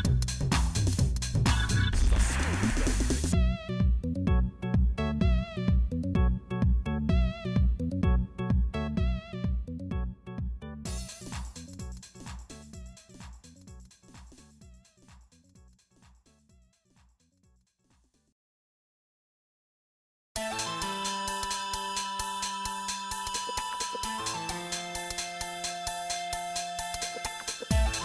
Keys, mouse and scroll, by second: 1.2 scroll down 2, 1.3 scroll up 1, 1.4 scroll down 1, 5.4-6.8 right drag, 15.9-17.7 drag, 18.1-24.8 drag, 26.4-28.0 drag.